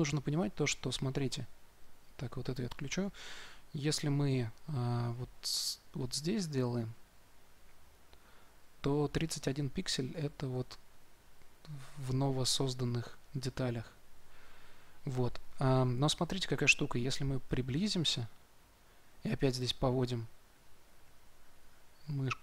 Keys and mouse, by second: 12.1-18.1 drag, 18.2-19.5 middle drag, 19.5-22.4 drag.